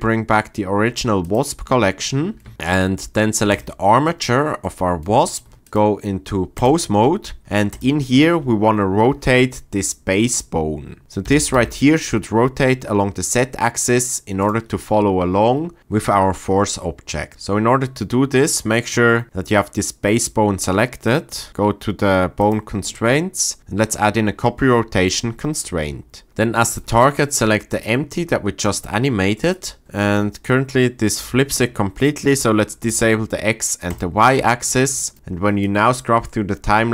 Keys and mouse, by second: 1.3 click, 2.0-2.5 middle drag, 3.5 click, 5.7-6.6 drag, 7.7 click, 11.3 r, 11.5 z, 23.6-25.1 drag, 32.9 click, 33.9 click, 35.7 click.